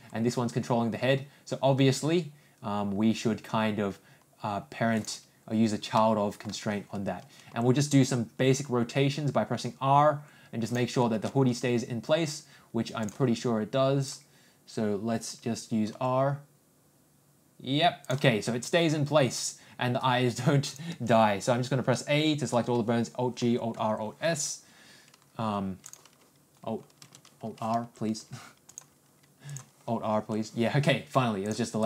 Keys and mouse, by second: 0.2 g, 5.9-6.4 middle drag, 7.5 r, 13.4-14.7 ctrl+drag, 16.2 r, 21.0 ctrl+click, 21.3 ctrl+a, 24.0 alt+s, 26.1-27.3 drag, 27.3 a, 27.7 alt+?, 29.9 click, 31.5 click.